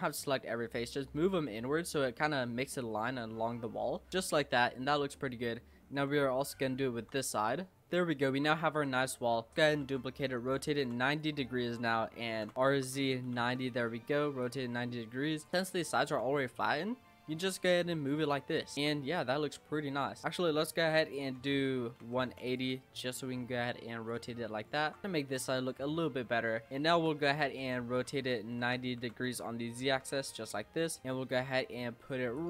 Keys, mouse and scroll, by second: 1.5-3.5 shift+middle drag, 3.5-4.1 scroll up 2, 3.7 middle click, 4.1-5.5 middle drag, 5.5-6.7 scroll up 3, 5.9 Tab, 6.7 shift+middle click, 7.5 click, 7.7 middle click, 8.3 Tab, 8.7 a, 9.5 shift+d, 9.8 r, 12.4 ctrl+z, 12.5 r, 14.4 click, 15.5-16.5 shift+middle drag, 16.5 click, 18.5 middle click, 18.8 Tab, 19.0-19.3 scroll down 3, 19.3-20.2 middle drag, 20.2 Tab, 20.8 r, 22.8-23.6 scroll up 2, 23.6 click, 24.3 middle click, 24.8 Tab, 25.0 middle click, 25.4 Tab, 25.5-26.7 middle drag, 26.7 shift+d, 26.9 r, 28.4 ctrl+z, 29.0 r, 30.5 middle click, 31.0 click, 32.3 click.